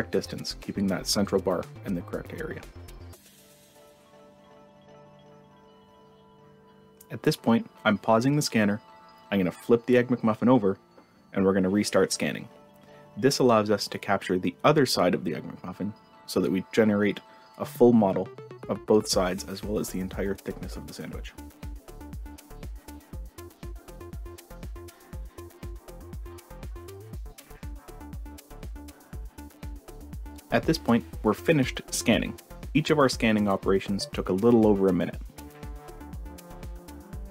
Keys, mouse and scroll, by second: 35.8 click.